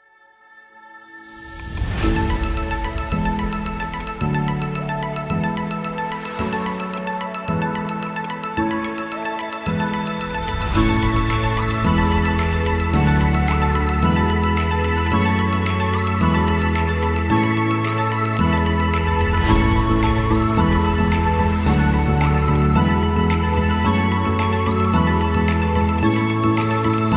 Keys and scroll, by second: 21.5 shift+F2, 21.9 Escape.